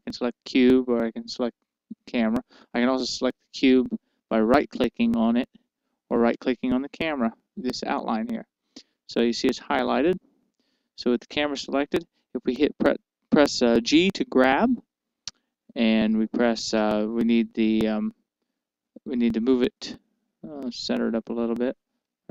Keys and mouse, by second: 0.9-4.0 drag, 5.9-10.2 right drag, 15.6 g.